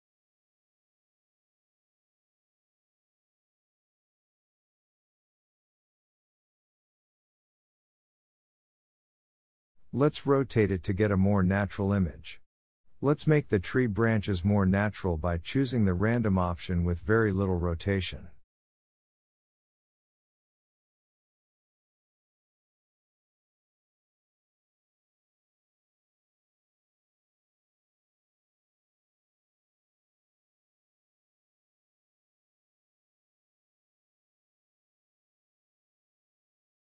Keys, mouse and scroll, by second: 2.4 Tab, 2.5 click, 2.9-4.2 middle drag, 4.2-4.6 scroll up 1, 4.6-7.4 middle drag, 7.4-10.6 drag, 11.2 click, 12.1 Tab, 12.6 1, 12.7 click, 13.2-13.5 scroll down 1, 13.5 r, 17.6 r, 20.0 Tab, 20.1 click, 20.5-20.8 scroll up 3, 20.8 shift+middle drag, 21.1 scroll up 1, 21.3-22.9 middle drag, 22.9 ctrl+z, 23.6 ctrl+z, 24.3 r, 27.1 Tab, 27.4 click, 27.7 scroll down 3, 27.9-30.7 middle drag, 30.7-31.1 scroll down 1, 31.1-31.4 shift+middle drag, 31.4 scroll down 1, 31.7-32.0 shift+middle drag, 32.0-32.7 scroll up 1, 32.7-33.3 scroll up 2, 33.3 click, 34.1 click, 34.5-36.9 scroll down 1.